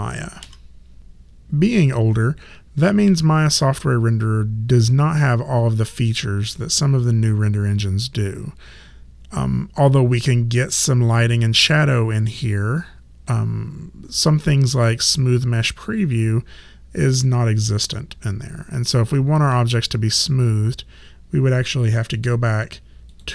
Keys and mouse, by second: 0.4 3, 22.2 click.